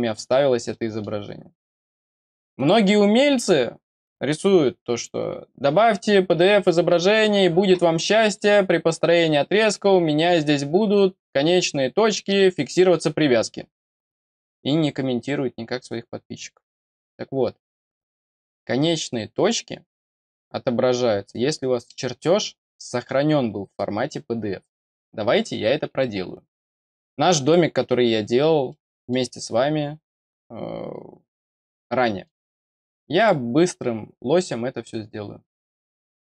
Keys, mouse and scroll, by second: 0.3-0.6 scroll up 2, 0.6 middle click, 2.5 click, 8.2 click, 9.2 scroll up 2, 18.8-22.1 scroll down 4, 24.8-25.3 scroll down 4, 26.6 click, 28.6 middle click, 31.9 middle click, 33.1 click, 35.8 click.